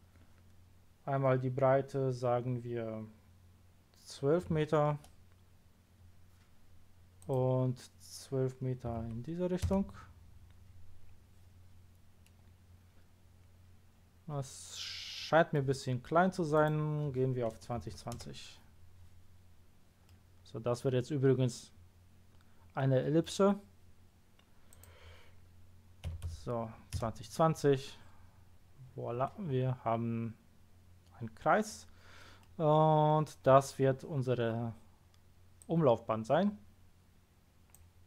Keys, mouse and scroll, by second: 4.4 KP_1, 4.5 KP_1, 4.9 Return, 7.2 click, 8.9 KP_1, 9.6 Return, 12.2-13.7 middle drag, 16.5 click, 17.9 KP_0, 18.1 Return, 19.4 scroll down 1, 20.0 middle click, 24.7 click, 26.0 KP_2, 26.2 KP_0, 26.9 Return, 28.4 scroll down 1, 28.8 scroll up 1, 29.2-31.0 middle drag, 32.4-33.0 middle drag, 35.6-37.1 drag.